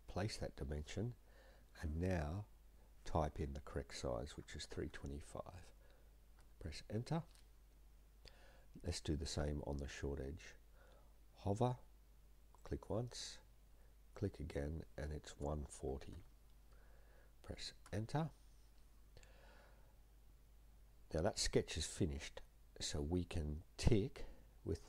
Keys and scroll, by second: 3.3 3, 4.4-4.8 typing, 6.4 Return, 15.4-16.6 typing, 17.9 Return.